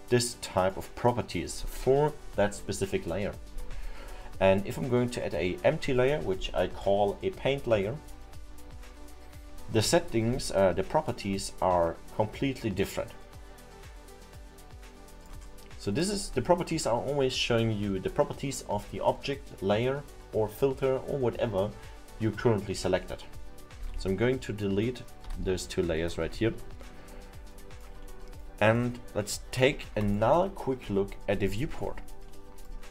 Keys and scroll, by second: 23.8 Delete, 25.4 Delete.